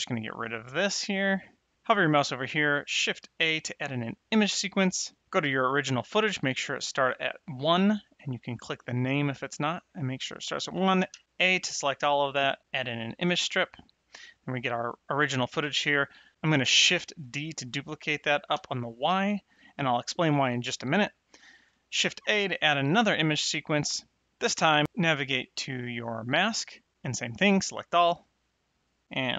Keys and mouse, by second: 0.1 click, 3.2 shift+a, 3.8 click, 7.8 click, 10.9 a, 12.6 click, 17.2 shift+d, 18.5 y, 18.9 click, 22.1 shift+a, 22.6 click, 24.7 click, 27.5 a, 28.5 click.